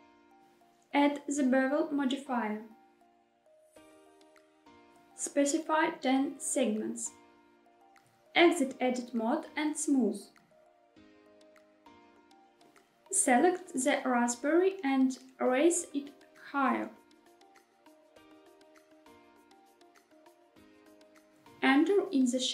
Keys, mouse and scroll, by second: 0.1 click, 0.3 middle click, 0.6 click, 1.8-4.6 drag, 4.9-7.1 drag, 9.8 Tab, 11.3 right click, 12.5 middle click, 12.9 click, 14.0 ctrl+click, 17.6 g, 18.5 z, 20.1 click, 20.7 middle click.